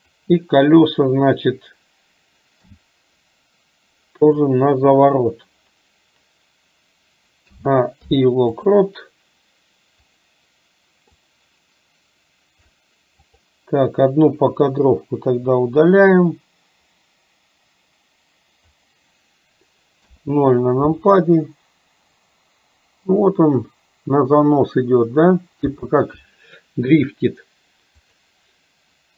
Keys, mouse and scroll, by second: 0.0 click, 10.0 click, 11.3-12.8 drag, 13.3 click, 16.2-18.8 drag, 28.2 click.